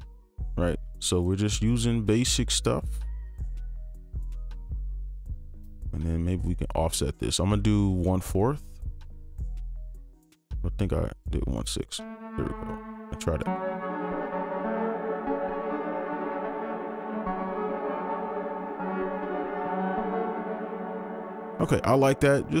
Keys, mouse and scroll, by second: 1.1 ctrl+click, 3.3 alt+click, 4.9 ctrl+click, 5.5 shift+click, 11.5 right click, 12.7 alt+click, 15.0 space, 18.3 alt+click, 18.8 space.